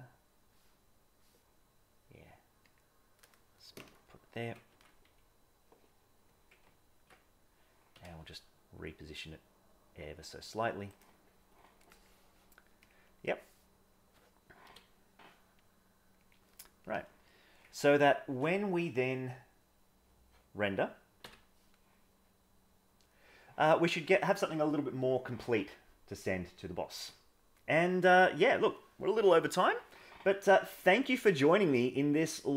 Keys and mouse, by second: 4.7 Tab, 6.6 ctrl+Tab, 7.9 g, 12.9 click, 14.6 g, 17.7 ctrl+Tab, 21.3 F12.